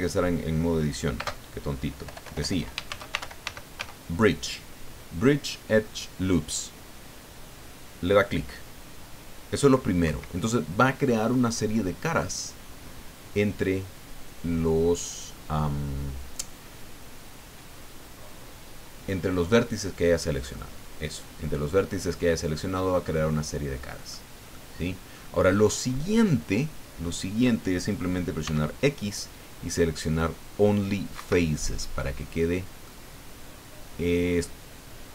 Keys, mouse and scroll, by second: 1.1-3.8 typing, 10.0 Escape, 11.3 middle click, 20.5-24.2 middle drag, 24.5 middle click, 28.4 x, 31.1 Escape, 31.7-33.0 middle drag.